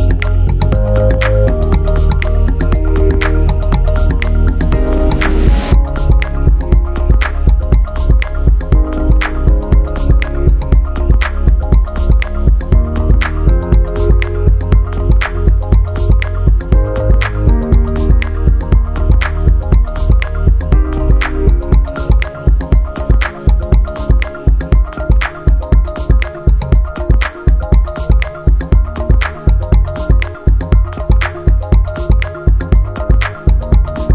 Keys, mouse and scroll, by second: 1.3 click, 4.7 click, 5.4-5.7 typing, 6.1 Return, 7.2 scroll down 1, 7.5 scroll up 1, 7.8 alt+click, 9.3 alt+click, 9.7 alt+click, 10.3 alt+click, 10.7 click, 13.2 click, 18.7 click, 19.4 typing, 19.9 Return, 20.5 alt+click, 22.1 alt+click, 22.7-23.1 typing, 23.4 Return, 24.0-24.3 scroll up 3, 24.5-25.1 shift+right drag, 25.2-26.1 scroll up 8, 26.3 alt+middle click, 26.6 scroll down 1, 26.9 alt+middle click, 27.5-28.4 scroll down 5, 28.2 middle click, 28.5 alt+middle click, 28.9 middle click, 28.9 scroll down 2, 29.2 alt+middle click, 31.0 click, 32.2 ctrl+c, 32.4 ctrl+v, 33.6 click.